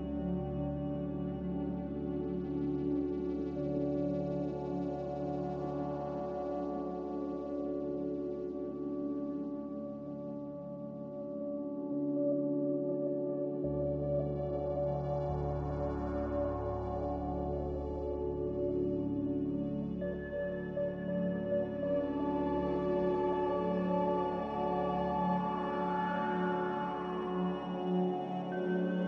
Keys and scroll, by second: 4.1 b, 14.7 z, 25.6 alt+Tab, 26.0 Delete, 26.9 Delete.